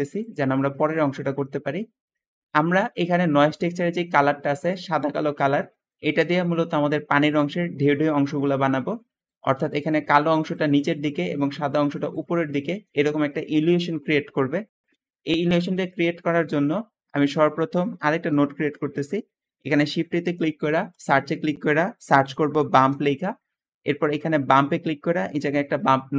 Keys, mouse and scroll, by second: 0.5 middle click, 3.9 `, 14.8 Escape, 16.2 scroll down 1, 18.1 shift+a, 18.2 shift+a, 21.9-22.6 typing.